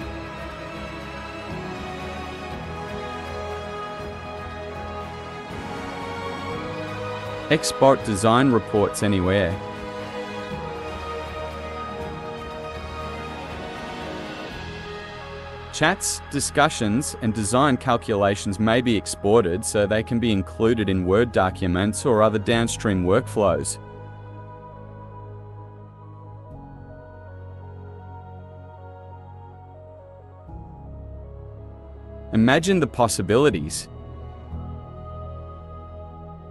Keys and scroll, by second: 0.0-1.7 typing, 3.0-5.5 typing.